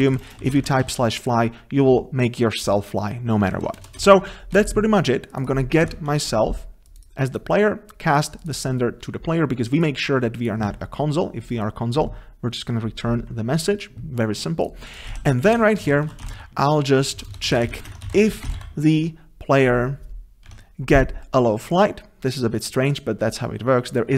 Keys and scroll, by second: 6.1 Tab, 15.1 ctrl+s, 16.4 ctrl+s, 17.2 ctrl+BackSpace, 19.1 Escape, 20.5 Tab.